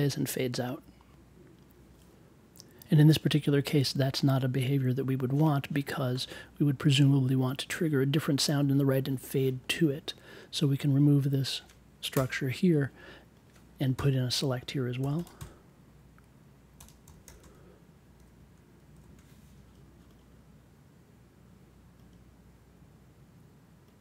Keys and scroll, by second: 12.1 BackSpace, 13.9 n, 16.8-19.0 typing.